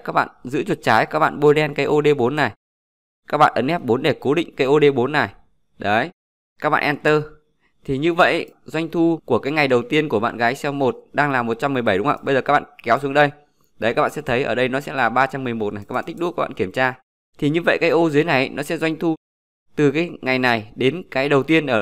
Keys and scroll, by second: 2.6 F4.